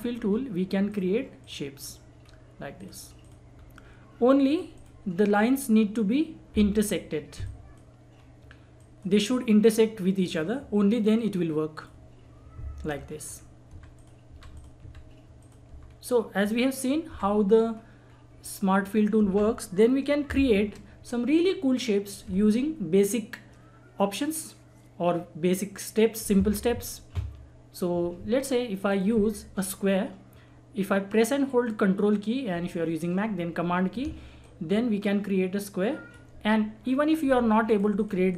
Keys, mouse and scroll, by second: 0.3-0.8 scroll up 1, 0.9 click, 1.8-2.2 scroll down 1, 2.2 scroll up 1, 2.8 click, 2.8 click, 3.5 scroll down 1, 4.5 click, 5.4-6.1 scroll up 1, 7.5 click, 8.1-8.5 scroll down 1, 8.8-13.6 drag, 13.6 Delete, 13.9 click, 14.2 Delete, 14.5 click, 14.8 Delete, 15.4 click, 15.6 Delete, 15.9 scroll down 1, 16.4 click, 17.1 Delete, 17.7-18.0 scroll up 1, 18.0-18.3 scroll down 1, 18.4 click, 19.2 Delete, 20.4 shift+F4, 28.9 click, 34.0 ctrl+Num_Lock, 34.0 click, 34.4-37.6 ctrl+drag.